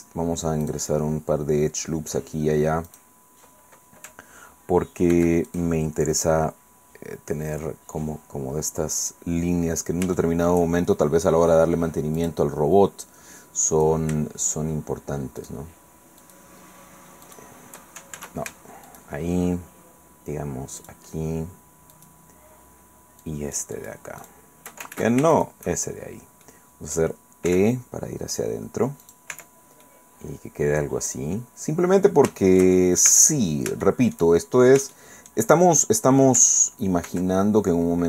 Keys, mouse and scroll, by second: 0.6 click, 2.9 click, 5.1 ctrl+r, 5.5 ctrl+click, 9.0 click, 9.6-10.2 scroll up 3, 10.2-12.1 shift+middle drag, 12.2 click, 13.7 click, 15.4 shift+right click, 16.2 shift+right click, 17.2 shift+right click, 18.1 ctrl+shift+z, 18.9 shift+right click, 20.8 shift+right click, 21.9 shift+right click, 23.2 shift+right click, 24.2 shift+right click, 24.9 ctrl+shift+z, 26.4 click, 27.5 e, 29.0 click, 29.3 Tab, 29.8-32.3 middle drag, 32.4 shift+middle click, 32.6 shift+click, 33.1 shift+Tab, 33.8 shift+middle click, 34.9 shift+middle click, 37.1 ctrl+r.